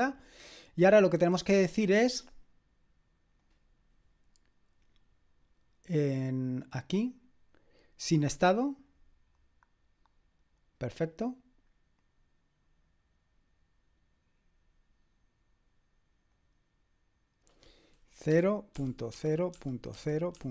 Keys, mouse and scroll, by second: 3.4 click, 8.0-9.8 drag, 16.3 click, 18.1-20.5 typing.